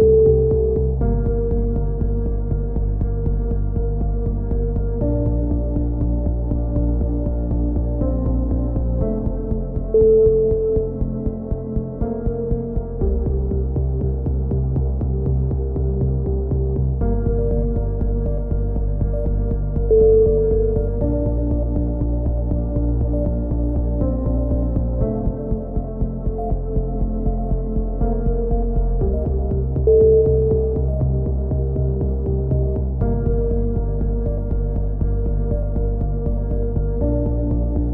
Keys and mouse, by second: 0.0-2.6 typing, 2.3-4.3 right drag, 5.4 a, 5.6 c, 6.2-7.4 right drag, 8.5 middle click, 8.7 middle click, 10.0 a, 10.3 c, 12.5 a, 14.5 middle click, 14.7 KP_7, 16.1 a, 16.7 s, 21.2 middle click, 21.5 KP_3, 23.1 click, 28.9 e, 29.9 click, 32.0 c, 32.6 click, 33.6 click, 36.5 a, 36.8 z, 37.1-37.9 drag.